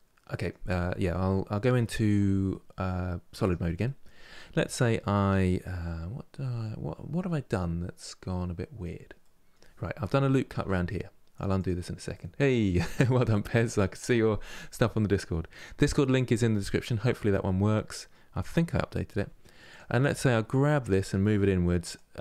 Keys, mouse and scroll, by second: 1.9 z, 3.5-10.1 middle drag, 10.1 ctrl+r, 11.8-14.8 middle drag, 17.4-18.9 middle drag, 18.9 1, 19.4 click, 20.5 g, 21.7 click.